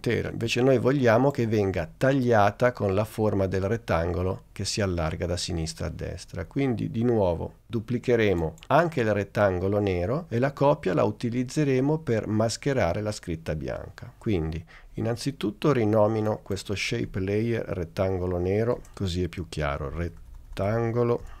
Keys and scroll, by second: 18.8 Return, 19.8-21.4 typing.